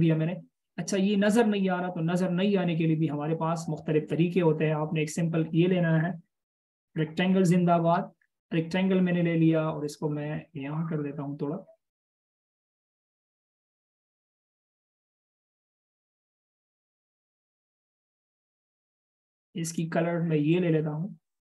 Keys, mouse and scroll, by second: 7.8-8.6 alt+shift+scroll up 1, 8.6-9.4 scroll down 1, 12.6 double click.